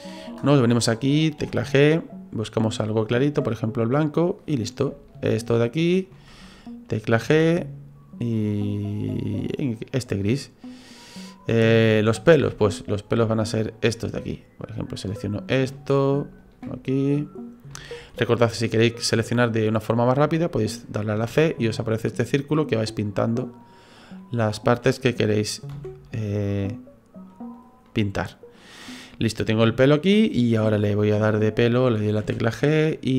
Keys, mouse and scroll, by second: 1.4 g, 4.5 right click, 5.1 shift+right click, 5.8 right click, 7.3 g, 10.2 right click, 10.6 middle click, 11.3-12.5 scroll down 3, 11.6 middle click, 12.6 shift+right click, 13.6 shift+right click, 14.1 shift+right click, 14.6 shift+right click, 14.9 shift+right click, 15.5 shift+right click, 15.7 middle click, 16.4 shift+right click, 16.6 middle click, 17.7 shift+middle click, 18.1 middle click, 18.7-19.6 scroll up 2, 19.6 scroll up 1, 21.3 c, 24.0 middle click, 25.7 c, 27.9 middle click, 28.8-29.6 scroll down 3, 29.1 middle click, 32.2 g.